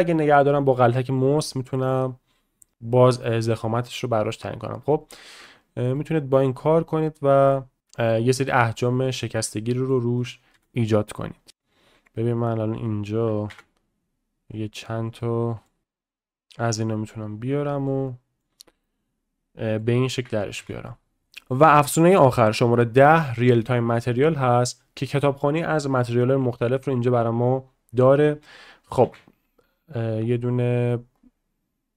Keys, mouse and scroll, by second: 5.9-8.9 middle drag, 9.1 click, 9.3-9.9 middle drag, 10.7 ctrl+w, 13.6 ctrl+w, 15.2-15.7 middle drag, 15.8-17.9 middle drag, 18.1 middle click, 18.8-19.8 middle drag, 24.6-28.2 drag, 29.0 shift+a.